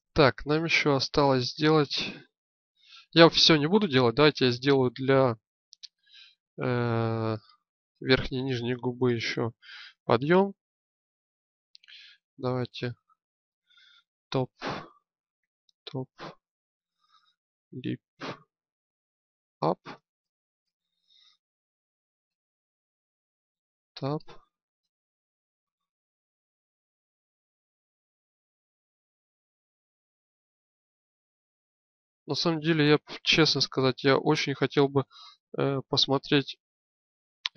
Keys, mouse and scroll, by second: 1.5-3.4 drag, 6.2-8.0 drag, 12.3-20.4 drag, 22.1-23.4 drag, 23.4 Tab, 35.2 middle click, 37.1 KP_1.